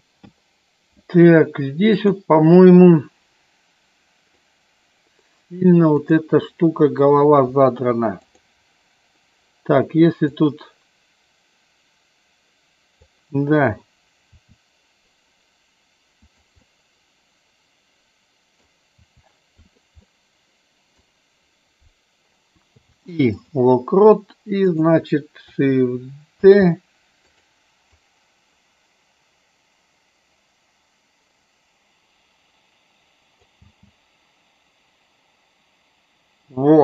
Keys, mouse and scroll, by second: 1.8 click, 5.9 click, 10.2-13.1 drag, 16.1 click, 16.6-18.5 middle drag, 18.5 scroll down 1, 19.5 click, 20.0-21.0 scroll up 1, 24.6 click, 27.2 click, 28.0-33.3 drag.